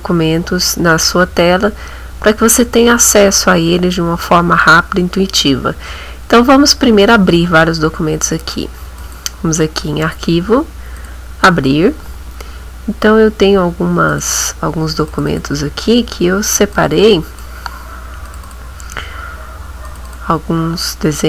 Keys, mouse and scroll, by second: 9.0 click, 11.0 click, 14.1 click, 15.1 click, 16.8 click, 18.3 click, 19.1 scroll down 2, 19.9 click.